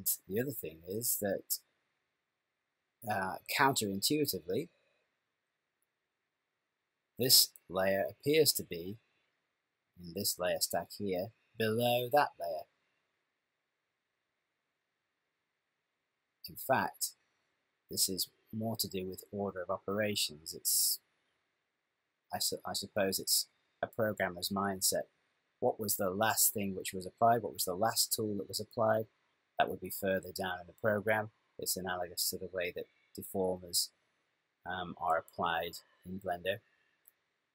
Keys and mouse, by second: 4.0 click, 14.8 click.